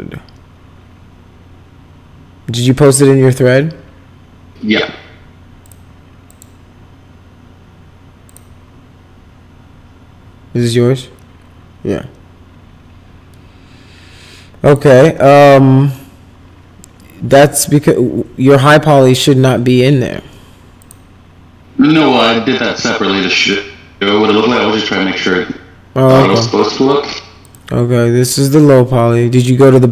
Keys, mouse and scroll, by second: 5.6 click, 6.3 click, 8.2 click, 14.7 click, 20.8 click, 27.4 click.